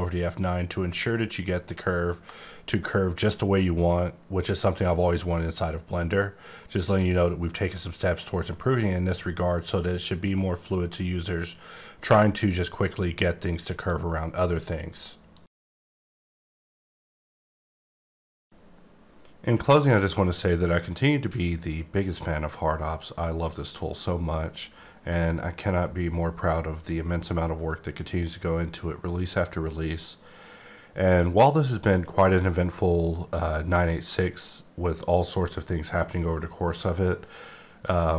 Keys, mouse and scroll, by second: 1.5-2.4 ctrl+scroll up 2, 13.7 click.